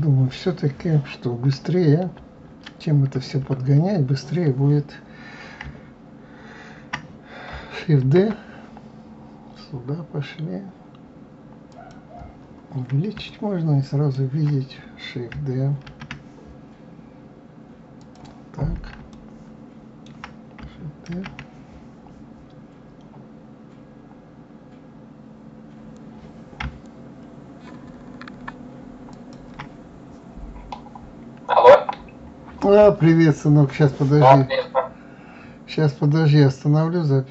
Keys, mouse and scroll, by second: 3.1 KP_Add, 3.5 KP_Add, 8.1 shift+d, 12.5-13.4 scroll up 3, 13.4-16.0 shift+middle drag, 16.0 shift+d, 19.2-21.2 shift+middle drag, 21.2 shift+d, 30.5-33.1 scroll down 2.